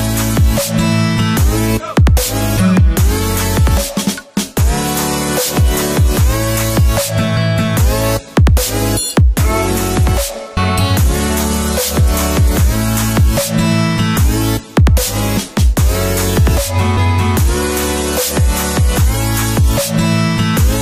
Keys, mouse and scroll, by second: 3.9 v, 5.1-6.5 drag, 12.3-12.9 alt+click, 12.8 alt+click, 14.4-15.3 shift+drag, 16.5-17.8 drag, 20.4-20.8 alt+scroll up 2.